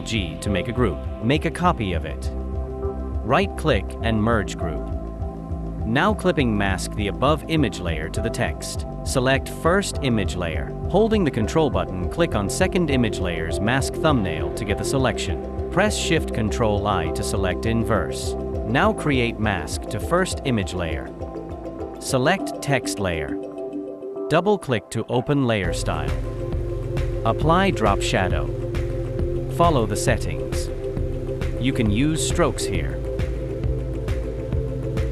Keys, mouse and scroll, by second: 1.5 ctrl+j, 3.5 right click, 7.7 alt+click, 9.5 ctrl+click, 14.9 ctrl+shift+i.